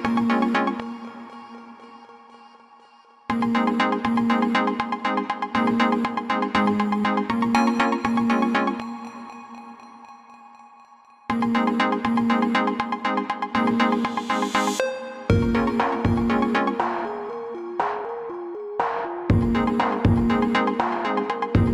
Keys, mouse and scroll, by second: 1.4 click, 5.8 click, 14.3 alt+click.